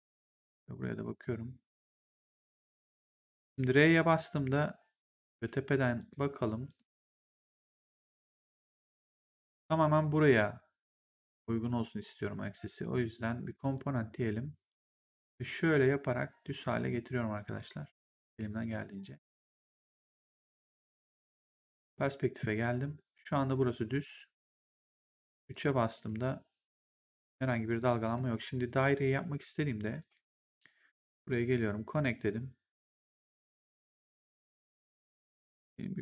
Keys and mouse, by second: 3.2 r, 5.9 right click, 6.6 click, 7.4 right click, 8.1 click, 11.2 click, 12.8 click, 15.2 click, 17.5 click, 19.4 click, 21.0 right click, 21.8 click, 25.0 3, 25.4 right click, 25.8 click, 27.7 click, 28.0 1, 29.9 right click, 30.4 click, 32.0 click.